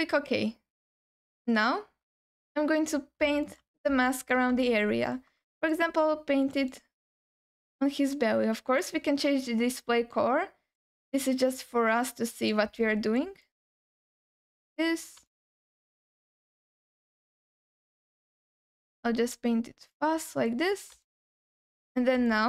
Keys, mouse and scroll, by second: 1.5-2.0 scroll up 1, 2.0 scroll down 2, 2.3 f, 3.5 f, 3.7 f, 4.0 alt+shift+middle click, 4.6 alt+middle click, 5.5 alt+middle click, 6.1 f, 6.7-7.9 drag, 8.8 click, 12.8 alt+middle click, 13.4 click, 14.3 alt+middle click, 14.7 click, 15.3 alt+shift+middle click, 15.9 click, 16.9 click, 17.5 click, 18.5 shift+middle click, 18.6 alt+shift+click, 19.0 click, 20.2 click, 20.7 scroll down 2, 21.0 alt+shift+middle click, 21.4 alt+middle click, 21.9-22.3 scroll up 2, 22.3 alt+middle click.